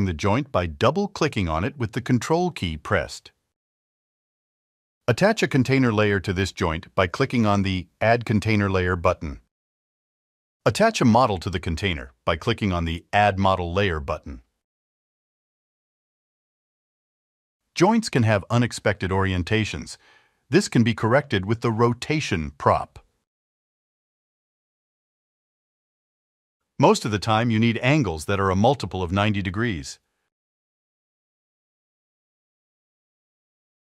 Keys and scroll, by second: 3.5 F2, 29.8-30.8 typing, 33.5 0.